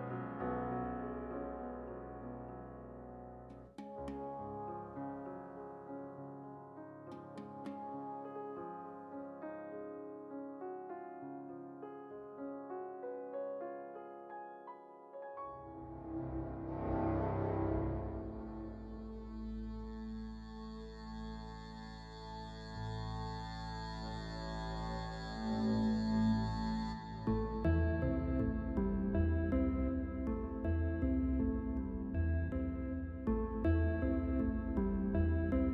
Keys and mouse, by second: 0.2 Tab, 1.6-9.1 right drag, 4.0 click, 4.9-6.1 drag, 7.3 s, 10.2-12.8 right drag, 12.1 i, 13.7 e, 15.0 ctrl+z, 15.5 e, 16.9 x, 17.7 right click, 19.1-20.2 drag, 20.2 middle click, 27.2-31.6 right drag, 31.6 e, 34.1 ctrl+r.